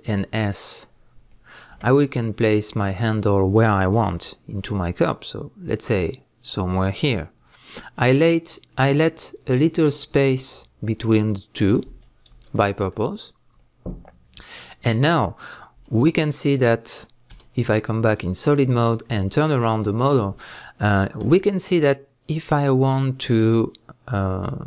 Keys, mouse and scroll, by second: 0.1 s, 1.5 click, 1.7 g, 3.4 click, 4.0 s, 7.4 click, 8.0 g, 9.3 click, 11.8 scroll up 1, 12.0-12.4 scroll down 1, 12.4-16.1 shift+middle drag, 13.0 scroll up 1, 16.1 scroll down 1, 17.3 z, 19.2 middle click, 20.6 scroll up 1, 21.0 shift+middle click, 23.6-24.6 middle drag.